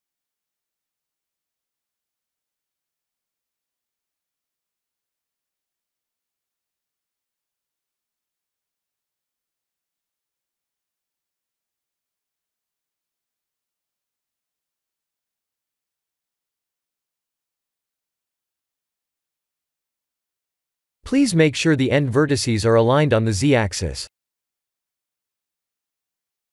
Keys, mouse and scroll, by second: 1.1 shift+z, 1.9 shift+z, 3.5 e, 5.3 r, 9.6 g, 11.7 n, 13.0 click, 14.2 click, 16.7 ctrl+z, 18.0 click, 20.6 Tab, 21.4 Tab, 21.6 1, 22.2 click, 22.6 b, 25.0 click.